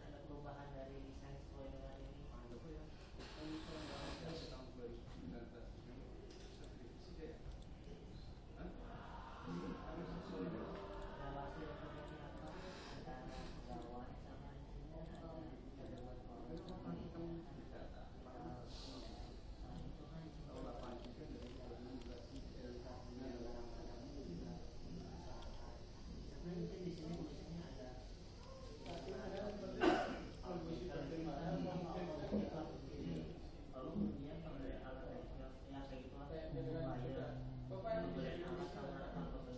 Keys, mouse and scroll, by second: 1.8-6.7 middle drag, 7.8 click, 11.2-13.4 drag, 14.2 click, 15.2 click, 16.8 right click, 17.2-18.4 drag, 19.2-20.5 middle drag, 22.5 middle click, 23.6 middle click, 27.1 click, 28.7 click, 29.0-30.9 middle drag, 31.6 middle click, 34.4 shift+a.